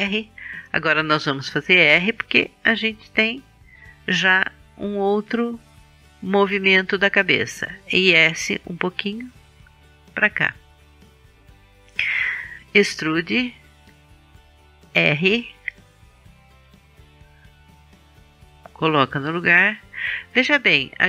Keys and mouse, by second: 1.1 r, 4.5-7.8 drag, 8.2 s, 10.1-11.5 drag, 12.0-14.4 drag, 12.8 e, 15.4 r, 16.3-18.2 drag.